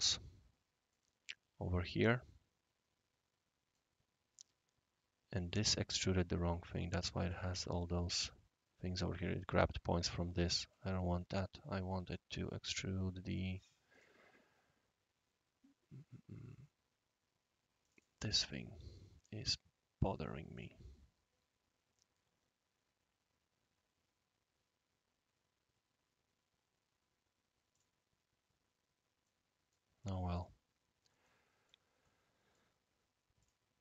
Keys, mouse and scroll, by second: 0.9-3.8 right drag, 4.1-4.8 scroll up 1, 6.9 click, 7.3 click, 7.8 click, 13.3 click, 13.9 click, 17.8 click, 18.9-19.3 right drag, 20.5 click, 26.5 scroll down 1, 26.9 scroll up 1, 27.7 click, 29.2-29.7 right drag, 30.3 click, 31.2-31.7 right drag, 32.0-32.5 right drag, 33.4 click.